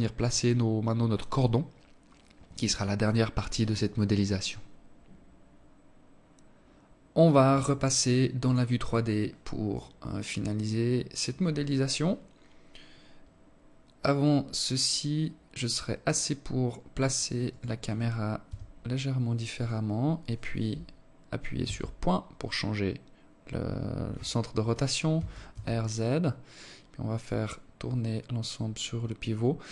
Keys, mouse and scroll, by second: 8.3 click, 16.2 right click, 16.6 right click, 17.6 g, 20.7 ., 24.3 r.